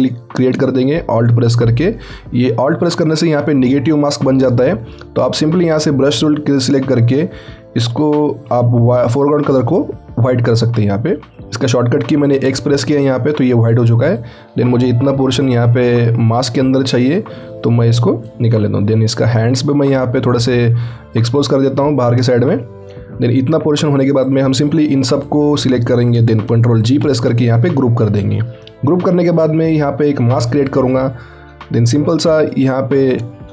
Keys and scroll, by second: 10.8 x, 26.9 ctrl+shift+g.